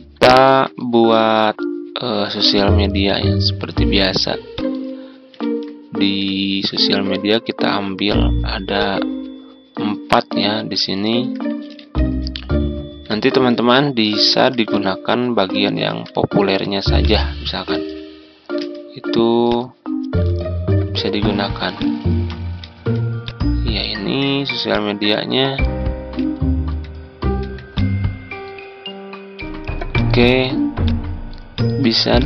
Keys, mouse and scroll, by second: 0.3 ctrl+z, 0.7 click, 5.3 Tab, 6.3 Tab, 8.0-10.3 drag, 11.7 Tab, 13.2 Tab, 17.0 shift+click, 17.7 shift+b, 19.4 click, 20.2-20.8 ctrl+scroll down 2, 21.7 click, 22.0 ctrl+z, 22.5 ctrl+z, 23.2-25.7 drag, 26.2-26.6 scroll up 1, 26.7-27.3 ctrl+scroll down 1, 27.3-27.7 scroll down 1, 27.7-32.2 drag.